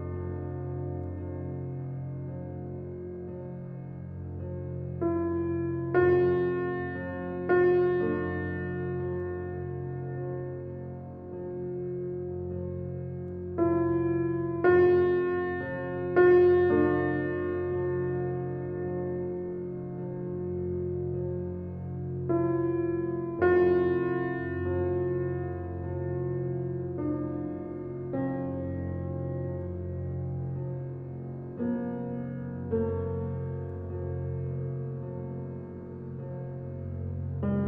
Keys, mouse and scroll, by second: 1.8 ctrl+alt+z, 2.9 alt+click, 3.5 ctrl+alt+z, 4.3-8.0 alt+drag, 8.5 click, 13.4-15.5 drag, 16.1-24.1 drag, 33.2 space, 33.4 click, 33.8 space, 34.5-37.6 alt+drag.